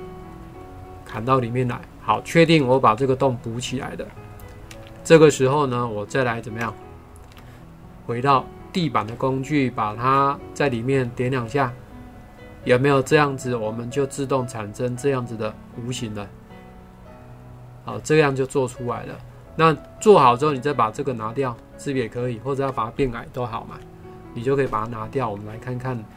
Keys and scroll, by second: 23.7 Delete.